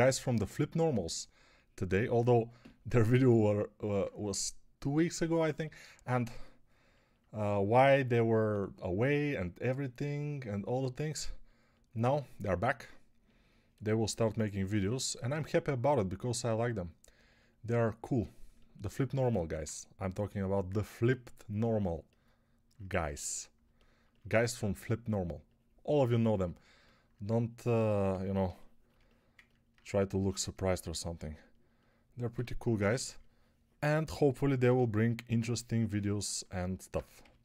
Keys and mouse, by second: 3.3 ctrl+alt+middle click, 28.0 ctrl+r, 32.7 [, 32.8 [, 37.1 g.